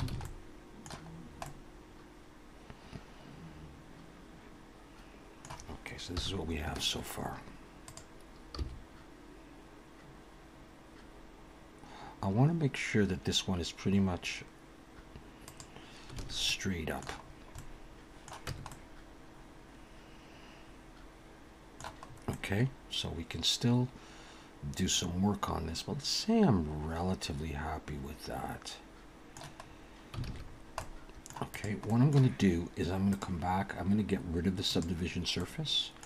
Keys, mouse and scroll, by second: 0.1 alt+a, 0.2 middle click, 1.1 scroll down 2, 1.4 middle click, 6.2 KP_1, 7.9 click, 8.6 g, 16.2 alt+a, 16.5 middle click, 17.3-17.7 scroll down 3, 17.6 middle click, 18.5 Tab, 18.7 middle click, 22.0 scroll up 2, 22.3 middle click, 29.6-30.3 scroll up 2, 30.3 alt+a, 30.4-30.8 scroll down 3, 30.8 middle click, 31.5 click, 31.9 middle click, 33.1 click, 34.7 click, 35.4 middle click.